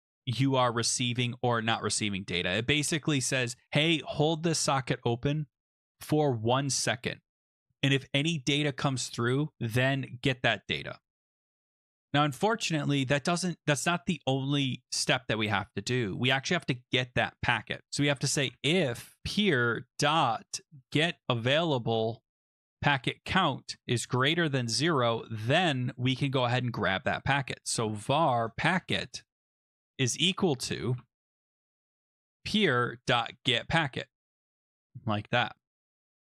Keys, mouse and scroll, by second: 1.9 Return, 18.2-21.7 typing, 22.5 Down, 22.6 Down, 22.7 Down, 22.8 Tab, 23.8-25.5 typing, 26.9-36.3 typing, 35.8 Return.